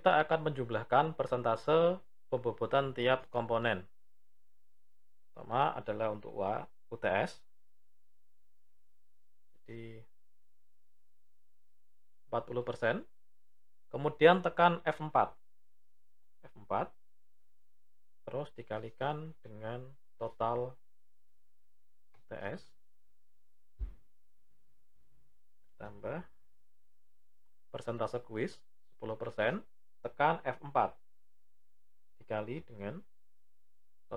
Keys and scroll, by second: 14.3 F4, 29.9 F4.